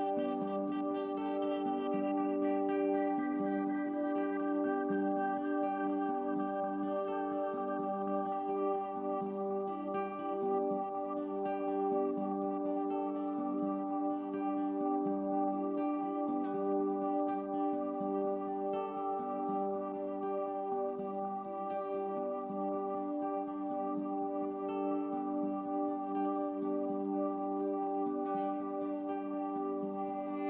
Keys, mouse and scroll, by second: 4.2-6.1 middle drag, 6.1 click, 12.9 click, 19.7 click, 20.7-23.7 drag, 24.7-26.8 drag, 26.8 KP_0, 28.6-29.7 drag, 29.7 KP_0.